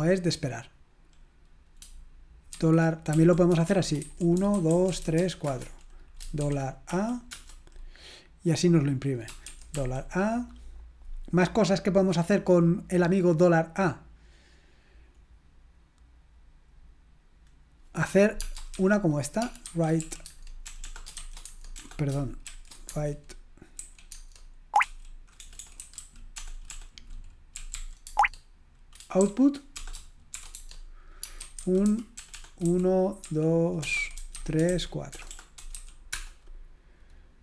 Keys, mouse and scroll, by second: 3.5-6.9 typing, 7.3 Return, 16.8-17.4 scroll up 1, 17.4-18.2 scroll up 1, 18.2-19.1 scroll up 1, 19.1-19.4 scroll up 1, 19.4-22.5 typing, 20.3 Tab, 23.8 typing, 24.8-36.3 typing.